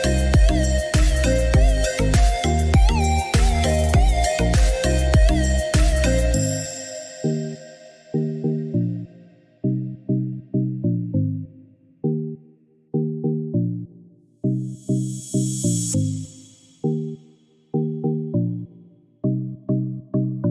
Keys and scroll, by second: 11.4 Escape.